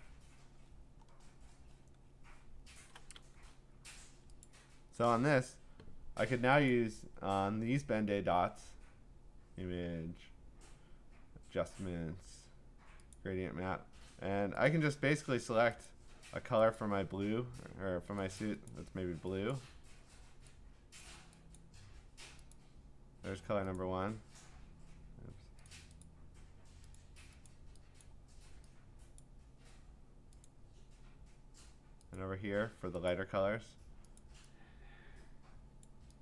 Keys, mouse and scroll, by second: 0.7-3.0 scroll, 4.4 click, 6.7 click, 13.1 click, 14.7 click, 15.8 click, 16.8 click, 18.4 click, 18.7 click, 19.5 click, 21.0 click, 21.6 click, 22.5 click, 23.7 click, 25.7 click, 26.0 click, 27.0 click, 27.5 click, 28.0 click, 29.2 click, 30.4 click, 32.1 click, 33.1 click, 34.2 click, 35.8 click.